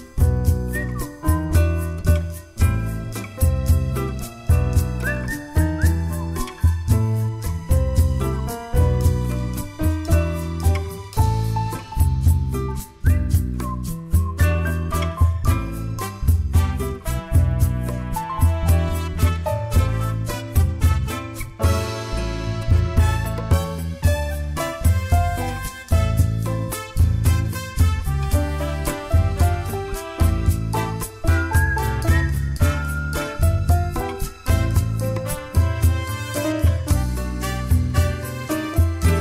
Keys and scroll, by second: 16.7-19.6 typing, 20.7 ctrl+a, 24.7 ctrl+a, 27.0-27.3 typing, 27.9 Return, 34.1 ctrl+a, 34.8 typing, 35.3 Return, 36.2 typing.